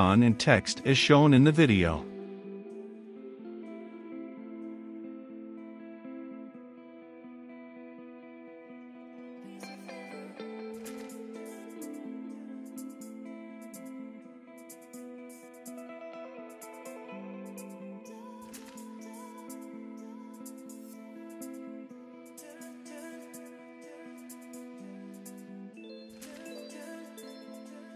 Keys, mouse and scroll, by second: 1.4 shift+o, 1.8 p, 2.1 n, 2.6 Return, 3.9-4.9 drag, 5.0 shift+s, 5.2 a, 5.4 v, 5.5 e, 6.0 Return, 8.1-10.2 drag, 11.6-27.9 drag.